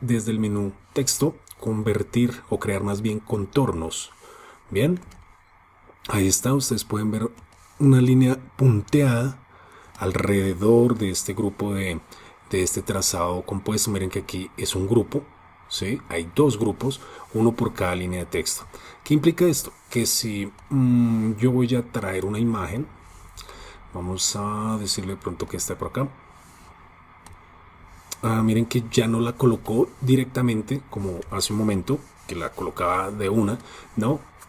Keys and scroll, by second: 3.1 shift+super+o, 23.2 super+d.